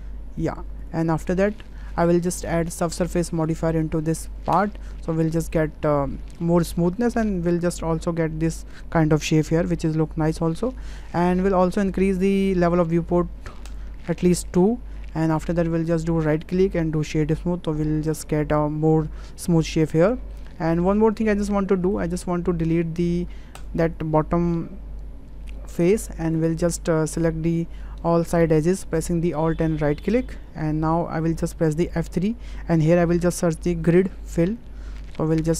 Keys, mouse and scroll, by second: 0.8 click, 0.9 Tab, 2.7-4.7 drag, 14.6-15.4 middle drag, 16.2-17.2 right drag, 17.7-18.1 middle drag, 20.0 middle click, 20.6 ctrl+middle click, 21.2 shift+middle click, 22.2 Tab, 23.2 3, 25.7 Delete, 27.7 2, 32.0 F3.